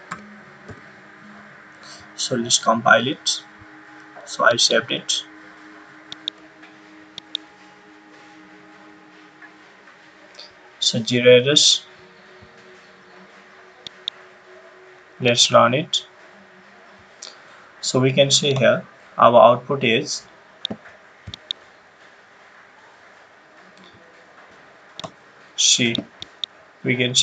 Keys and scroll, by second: 0.0-0.6 typing.